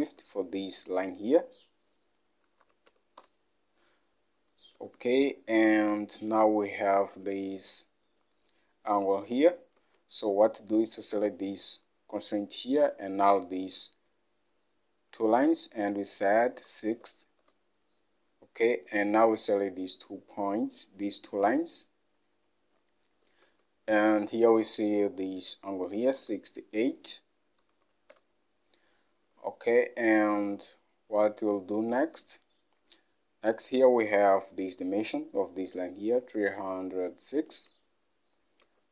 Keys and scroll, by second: 0.1 alt+Tab, 2.5-3.5 typing, 4.9 alt+Tab, 16.7 typing, 17.5 Return, 23.5 alt+Tab, 26.3 alt+Tab, 27.7 6, 27.9 8, 28.2 Return, 32.1 alt+Tab, 38.7 Escape.